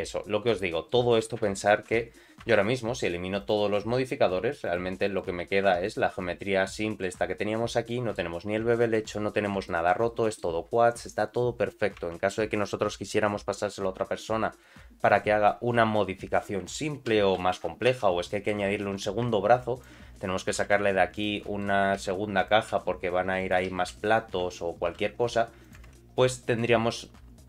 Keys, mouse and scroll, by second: 0.5 middle click, 1.9 Tab, 2.5 Tab, 3.4 click, 4.6 click, 5.0 click, 5.7 Tab, 5.8-7.0 middle drag, 7.3-8.1 scroll up 3, 7.9 middle click, 8.4 scroll down 1, 8.7 shift+middle click, 9.1 middle click, 9.7 shift+middle click, 10.0 middle click, 12.0 Tab, 17.9 Tab, 18.3 middle click, 18.7 3, 18.9 click, 19.7 ctrl+click, 20.6 i, 21.4 middle click, 22.0 e, 23.5 click, 23.7 e, 24.9 i, 25.9 Tab, 26.1 middle click, 26.7-27.0 scroll down 2, 27.0 middle click.